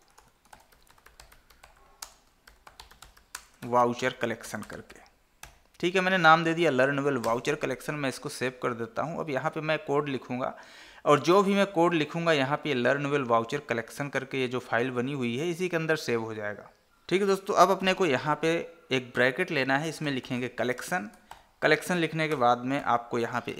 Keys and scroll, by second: 2.3 space, 3.6 space, 21.1 Tab.